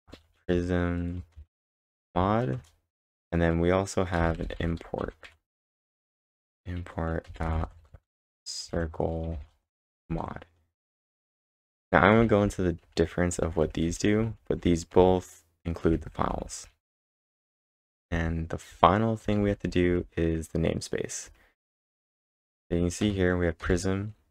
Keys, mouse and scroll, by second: 0.0-2.5 typing, 2.6 Return, 4.0-6.1 typing, 7.3-9.8 typing, 12.2-18.6 typing.